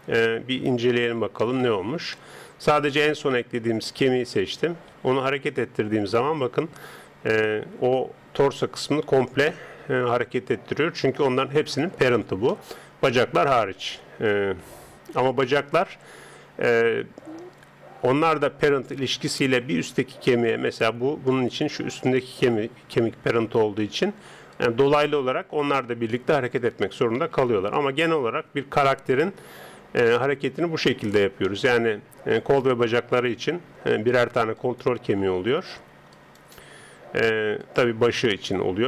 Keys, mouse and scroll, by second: 5.0 g, 11.8-14.7 middle drag, 14.7 g, 18.0 middle click, 18.9 right click, 19.3 middle click, 20.8 middle click, 21.8 right click, 23.3 middle click, 23.4 click, 25.0 right click, 25.8-27.6 drag, 27.4 g, 27.6 right click, 28.8 KP_3, 30.2-33.7 middle drag, 32.4 right click.